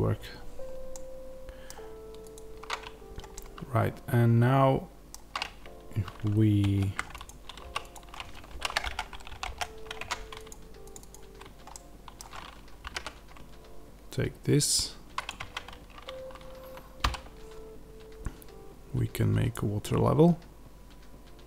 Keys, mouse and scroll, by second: 2.2 click, 3.2-7.1 middle drag, 5.3 Tab, 7.1 click, 7.5 3, 7.7 click, 8.4 shift+d, 8.8 Return, 9.3 p, 9.4 Return, 9.9 Tab, 10.3 click, 11.6-15.2 middle drag, 12.7 g, 15.2 click, 15.3 Tab, 16.0 a, 16.9 e.